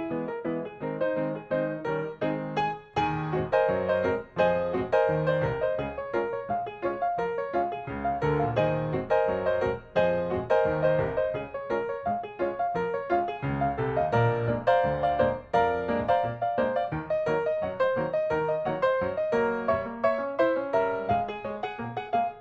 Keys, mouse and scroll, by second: 0.2 click, 2.7-3.8 middle drag, 4.2 g, 5.5 click, 6.9 middle click, 8.4 click, 8.7 middle click, 9.7 click, 10.2 middle click, 11.0 m, 11.3 click, 13.7 middle click, 14.0-14.8 scroll down 1, 14.8 shift+middle click, 15.7 click, 17.9-19.0 scroll down 1, 19.0 click.